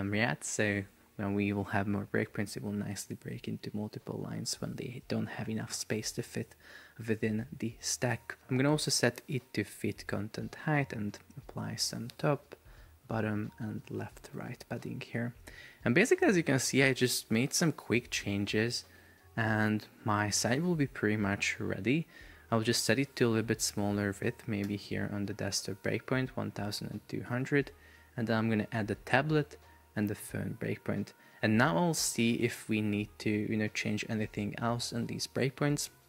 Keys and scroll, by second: 14.3 Return.